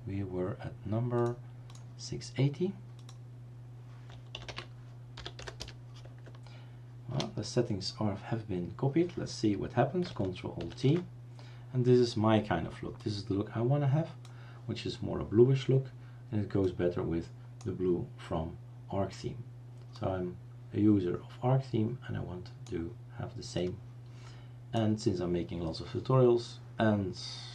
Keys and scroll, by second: 4.6-6.1 typing, 7.2 Return, 10.7 ctrl+alt+t.